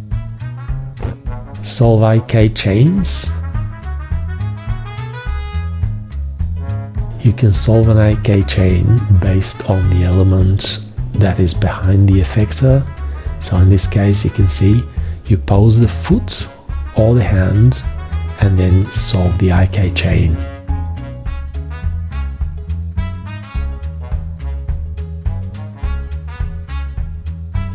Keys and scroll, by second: 1.6 v, 8.1 g, 26.0 v.